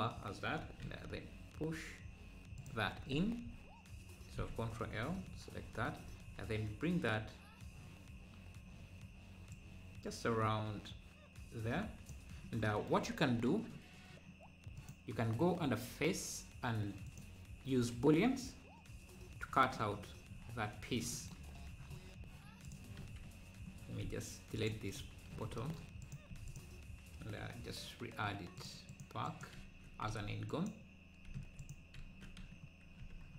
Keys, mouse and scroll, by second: 4.4 ctrl+l, 5.8 scroll down 1, 12.6 click, 14.8-17.8 drag, 20.1 scroll down 2, 21.9-22.6 scroll up 5, 22.6-23.8 drag, 23.8 scroll down 1, 24.0 x, 26.0 click, 26.3 x, 28.5-29.5 drag, 30.0 z, 30.5 click, 31.3 x.